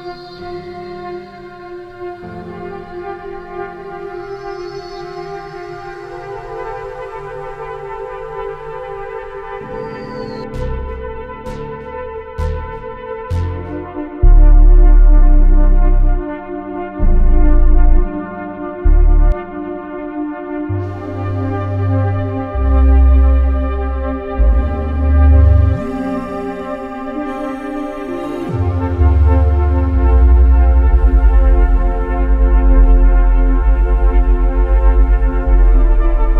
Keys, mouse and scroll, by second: 1.9 right click, 5.3 click, 6.1-7.4 drag, 19.5 click, 21.4-21.8 drag, 22.2 click, 23.1-29.5 drag, 30.0-31.5 drag, 32.1 click, 32.8-33.9 drag, 34.2-36.3 drag.